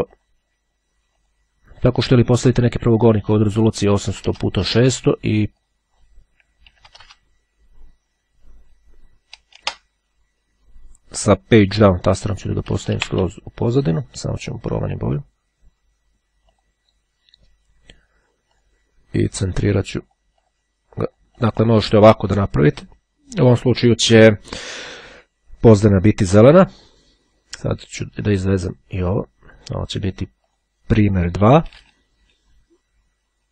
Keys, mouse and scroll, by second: 0.8 click, 2.7 click, 3.6 KP_8, 4.3 KP_0, 5.7 click, 6.9 KP_6, 7.0 KP_0, 7.4 KP_Enter, 11.1 Page_Down, 16.8 click, 18.8 click, 20.2-21.2 drag, 28.4-29.8 drag, 30.6 click, 31.8 BackSpace, 32.0 2.